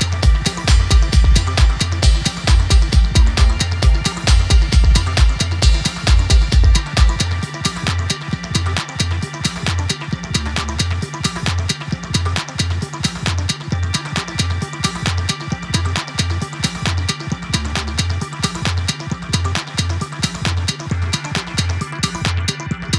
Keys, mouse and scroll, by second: 5.2-7.6 drag, 10.1 click, 11.1 alt+scroll up 1, 11.8 click, 12.4-13.5 alt+scroll down 1, 15.0-15.5 shift+drag, 15.6 alt+scroll down 1, 16.6 click, 18.7 super+d, 19.6-21.3 drag.